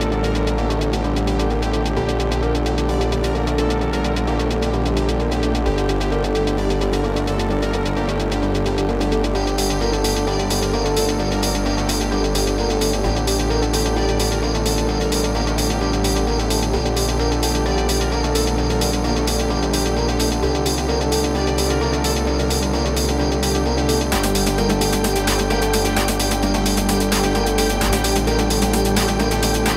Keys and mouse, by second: 0.9 z, 1.1 space, 1.2 click, 1.4 space, 2.8 click, 3.8 space, 4.0 click, 4.3 space, 5.4 click, 7.6 click, 10.3 click, 12.1 click, 16.1 click, 16.9 space, 17.0 click, 17.2 space, 19.1 space, 19.2 click, 19.3 space, 20.1 space, 20.9 click, 22.5 alt+click, 24.1 -, 24.3 space, 24.4 click, 24.6 space, 25.5 click, 28.1 click.